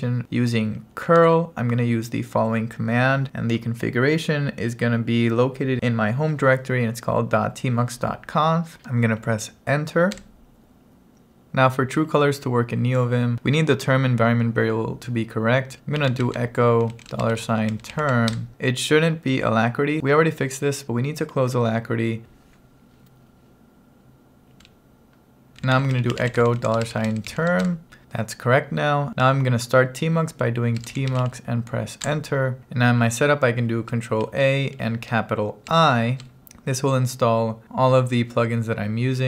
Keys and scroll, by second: 1.1 super+v, 10.3 Return, 15.5-18.3 typing, 18.4 Return, 22.2 Return, 25.3-27.8 typing, 30.6-31.7 typing, 32.1 Return, 34.3 ctrl+a, 35.7 shift+i.